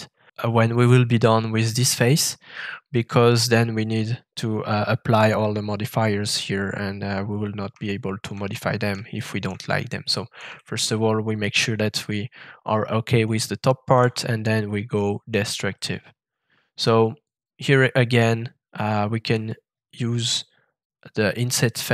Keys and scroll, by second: 13.9 f.